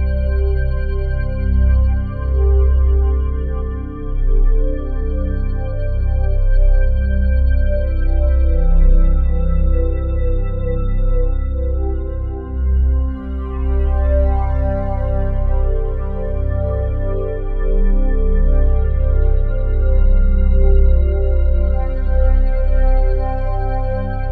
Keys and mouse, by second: 1.8 click, 3.4 click, 7.4 click, 9.1 click, 9.9 click, 12.1 click, 14.9 click, 17.5 click, 19.2 click, 19.7-20.2 drag, 20.3-22.9 drag, 23.0-24.3 drag, 23.6 space.